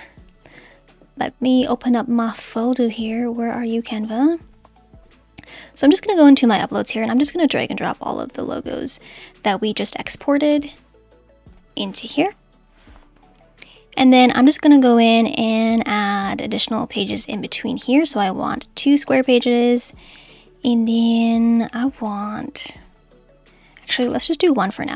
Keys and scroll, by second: 24.0 BackSpace.